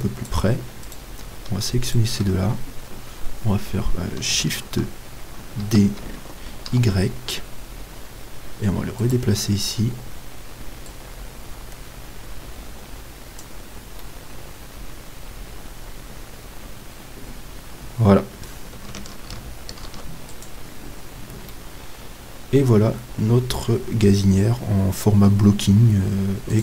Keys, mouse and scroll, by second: 0.9-3.7 right drag, 5.6 shift+d, 9.4-12.8 middle drag, 10.8-12.8 drag, 14.1-16.0 middle drag, 19.8 ctrl+s, 21.6 middle click, 22.2-23.5 middle drag.